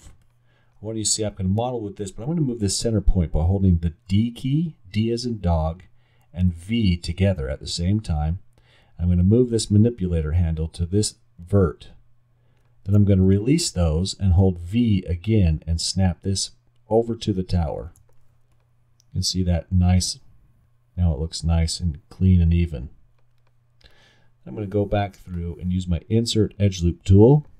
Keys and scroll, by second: 4.1 d, 6.5 v, 8.2 v, 14.4 v, 16.2 v.